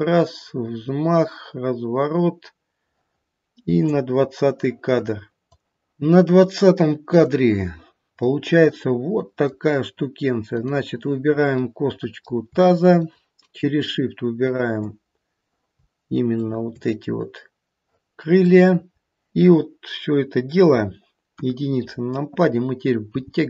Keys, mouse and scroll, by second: 7.1 click, 8.3 middle click, 9.4 middle click, 10.4 click, 11.4 middle click, 12.9 shift+click, 17.1 shift+click, 18.5 middle click, 21.2 KP_1, 23.1 g.